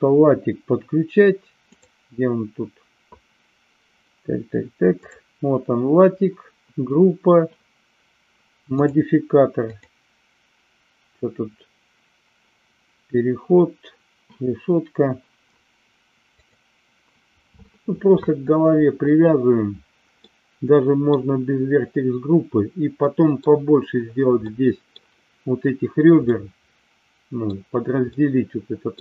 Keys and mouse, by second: 1.7 click, 5.0 click, 8.8 click, 9.6-14.3 drag, 16.3 click, 20.2 middle click, 23.0-23.3 middle drag, 24.4 middle click, 26.2-27.4 middle drag, 28.0-29.0 middle drag.